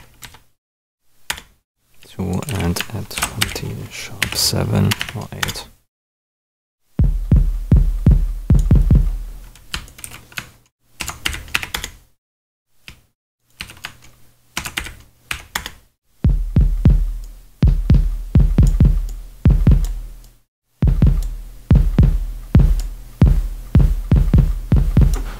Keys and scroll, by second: 0.0-0.3 typing, 1.2 Return, 2.0 super+Return, 2.4 super+a, 3.1 shift+super+d, 3.4 shift+#, 4.2 7, 4.8 BackSpace, 4.9 8, 5.4 Return, 10.0 super+a, 10.9 shift+super+d, 11.2 shift+#, 11.5 6, 11.7 Return, 13.5 super+a, 14.5 shift+super+d, 14.7 shift+3, 15.2 7, 15.5 Return.